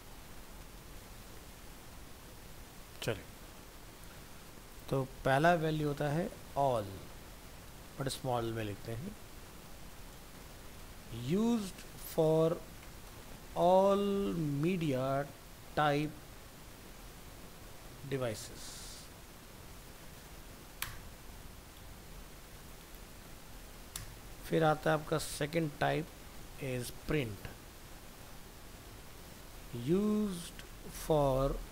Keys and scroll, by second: 9.7 ctrl+shift+Left, 20.8 ctrl+BackSpace, 22.8 ctrl+c, 24.2 ctrl+v, 26.7 ctrl+shift+Left.